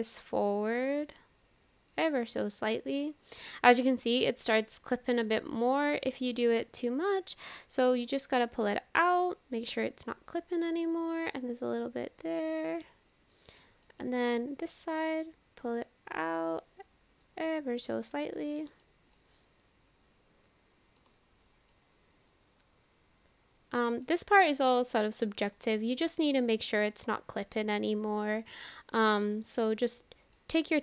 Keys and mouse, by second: 2.4 middle click, 3.4 shift+middle click, 3.8-6.1 middle drag, 7.7-9.3 drag, 9.6-10.9 middle drag, 11.9-13.1 drag, 13.3 middle click, 14.0 shift+middle click, 15.3-17.2 drag, 17.5 shift+middle click, 18.0 middle click, 18.9 shift+middle click, 19.4-21.0 middle drag, 21.2 shift+middle click, 22.4-23.8 drag, 24.1-25.5 middle drag, 25.8 shift+middle click, 27.2-29.2 drag, 29.8 middle click, 30.7 middle click.